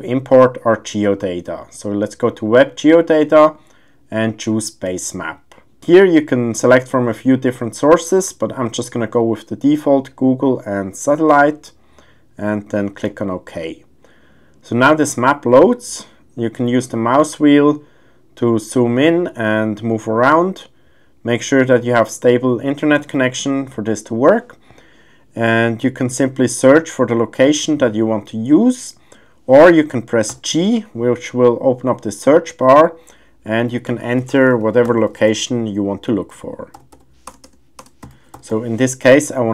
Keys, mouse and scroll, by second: 17.1-17.5 middle drag, 19.9-20.4 middle drag, 27.7-28.5 drag, 30.3 g, 36.9 t, 37.4 BackSpace, 38.5 t.